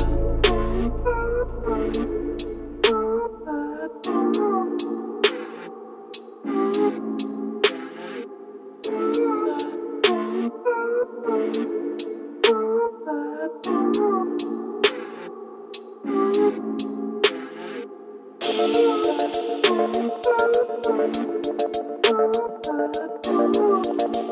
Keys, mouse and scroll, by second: 0.4 r, 1.3 g, 1.5 z, 2.2 KP_0, 3.3 click, 4.4 shift+d, 4.6 y, 5.6-9.1 typing, 10.4 g, 10.5 y, 12.1 middle drag, 12.4 middle click, 13.2-16.1 typing, 15.1 click, 15.8 click, 17.5 drag, 17.7 click, 18.0 s, 18.6-20.1 s, 19.2 click, 20.1 middle click, 20.4 middle click, 21.2 s, 22.4 g, 23.1 x, 24.0 middle click.